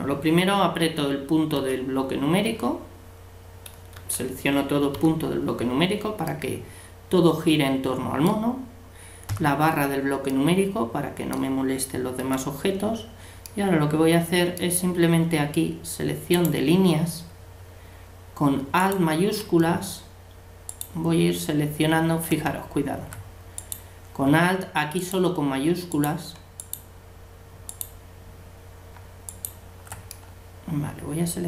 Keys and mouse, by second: 3.9 a, 12.2 a, 16.4-18.2 drag, 18.8-20.6 right drag, 22.4 right click, 23.6-31.0 right drag, 30.4-31.4 middle drag.